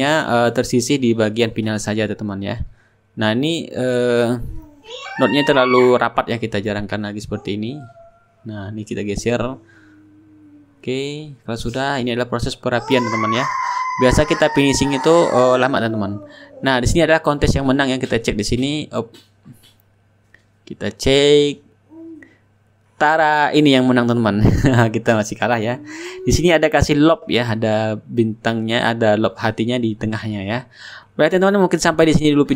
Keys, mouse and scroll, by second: 0.0-4.0 drag, 4.2-6.1 drag, 7.5 click, 8.2 shift+right click, 9.0-10.7 shift+drag, 9.0 shift+right click, 10.9-14.0 shift+drag, 11.0 shift+right click, 11.2 shift+middle click, 11.5-14.0 ctrl+right drag, 14.3 click, 16.1-18.7 drag, 19.4 click, 21.0 click, 23.0 click.